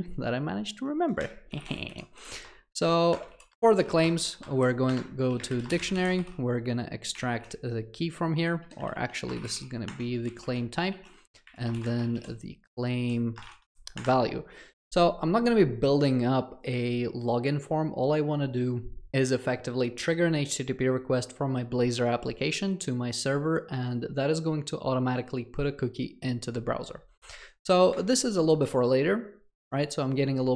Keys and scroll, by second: 3.2 Return, 9.9 Return.